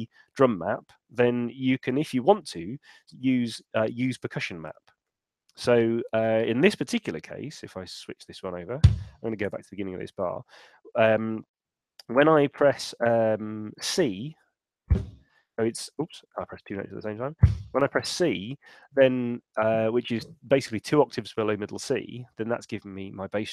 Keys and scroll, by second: 9.4 Return, 11.8 Right, 12.7 Left, 16.5 super+z.